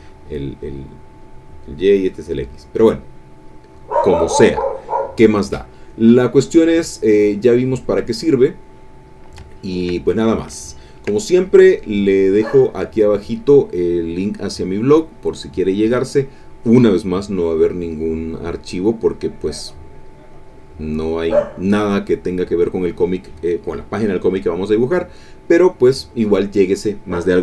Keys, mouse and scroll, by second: 2.4 click, 6.0 click, 7.3 click, 7.7 click, 8.7 click, 9.5 ctrl+click, 10.1 ctrl+click, 10.6 ctrl+click, 11.2 ctrl+click, 12.3 click.